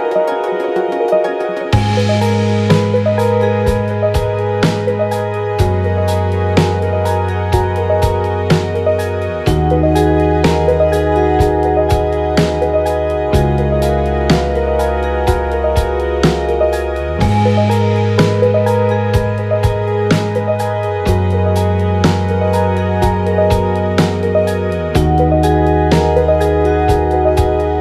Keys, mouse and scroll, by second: 14.5-15.5 drag, 23.0 Tab.